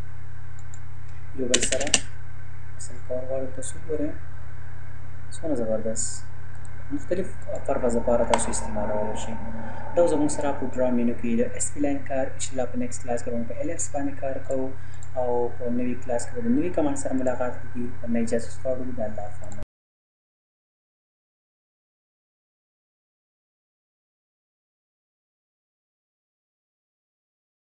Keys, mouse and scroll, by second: 1.6 space, 3.8-4.1 scroll down 1, 6.6 click, 8.2 Delete, 9.1-9.5 scroll up 1, 10.3 click, 14.4 click.